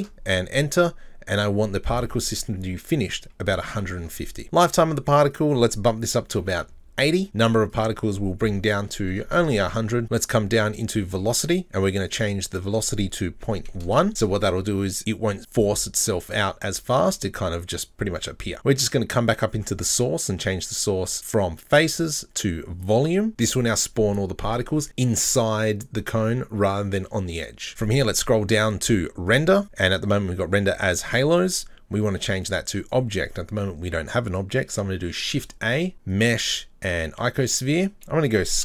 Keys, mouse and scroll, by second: 1.3-4.3 drag, 5.3-7.3 drag, 7.7-9.2 drag, 9.2 KP_0, 10.0-10.8 scroll down 2, 10.8 click, 12.1-14.5 drag, 19.9-23.3 drag, 27.7 scroll up 10, 27.8-29.3 scroll down 12, 29.3-29.8 drag, 31.0-34.0 drag, 35.3 shift+a.